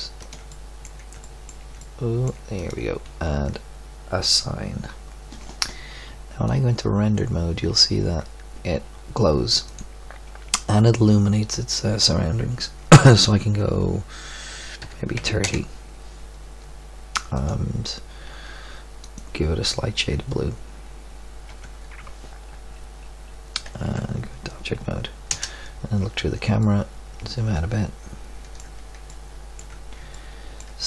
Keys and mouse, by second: 4.2 click, 6.4-6.8 drag, 7.2 click, 9.9 middle click, 17.7 middle click, 21.7 Tab, 23.9 Tab, 25.5 KP_0.